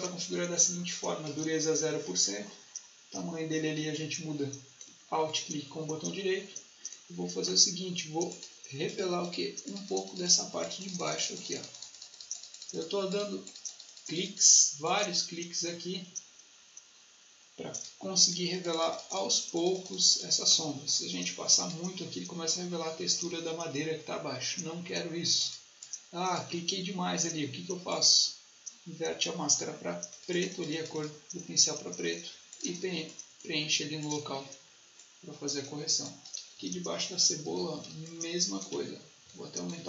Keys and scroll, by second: 23.2 ctrl+z, 36.6 ctrl+z, 37.5 ctrl+alt+z.